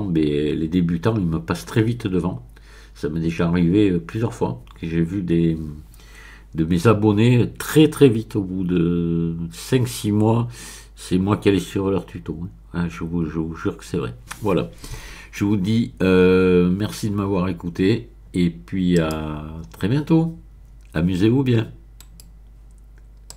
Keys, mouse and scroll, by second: 18.9 click, 22.0 right click, 23.3 click.